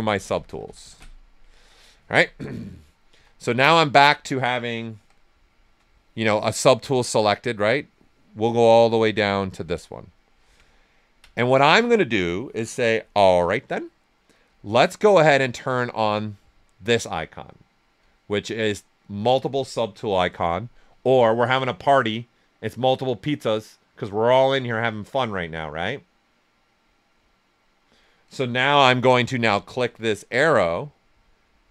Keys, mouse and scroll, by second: 3.1 w, 3.6 alt+right click, 4.9 shift+f, 6.5-9.5 drag, 10.1 alt+right click, 10.7 ctrl+right click, 15.6 click, 20.0 shift+m, 22.7 typing, 28.4 shift+m, 30.5-31.7 drag.